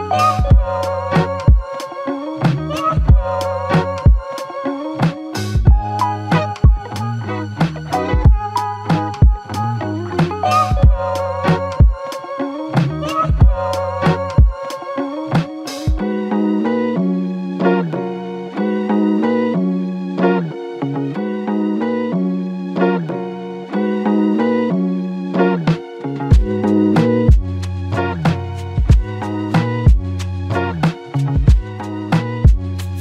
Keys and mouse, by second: 9.6 shift+click, 17.3 shift+click, 20.8 alt+click, 24.0 double click, 30.5 alt+click, 31.5 alt+shift+click.